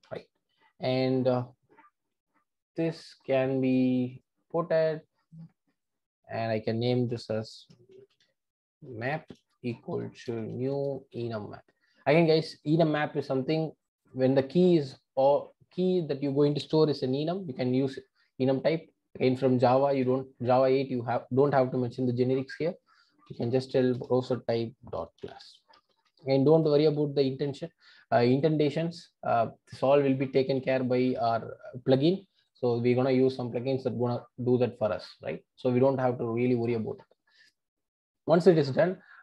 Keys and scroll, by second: 3.6 alt+Return, 24.2 Return.